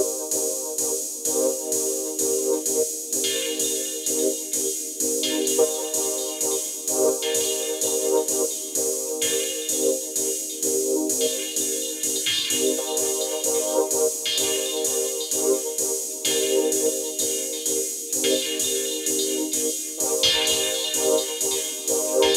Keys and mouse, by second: 0.5 click, 1.6 click, 12.2 click, 13.1 click, 13.4 click, 14.3 click.